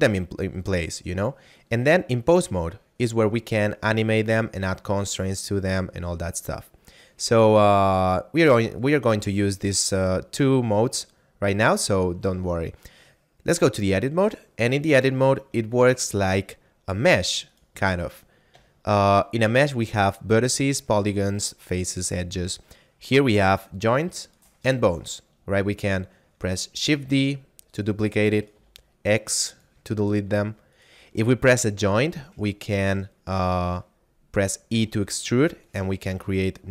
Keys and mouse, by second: 13.2 click, 14.7 right click, 16.1 shift+middle click, 17.4 right click, 18.1 middle click, 18.7 shift+middle click, 23.2 right click, 26.7 shift+d, 27.7 click, 28.3 right click, 28.5 x, 29.2 click, 30.7 right click, 31.3 middle click, 34.7 e, 35.5 click, 36.0 e.